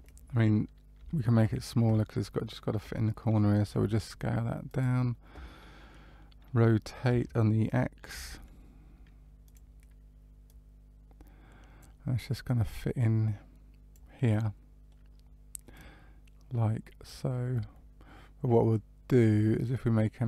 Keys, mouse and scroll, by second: 0.9 Tab, 3.6 s, 7.0 r, 10.4 click, 12.4 click, 14.2 middle click, 15.7 click.